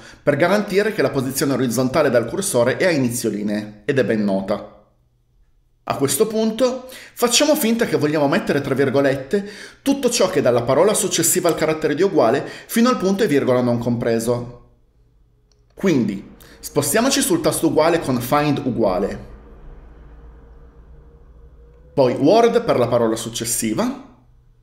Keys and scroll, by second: 18.4-19.4 typing, 22.6 w.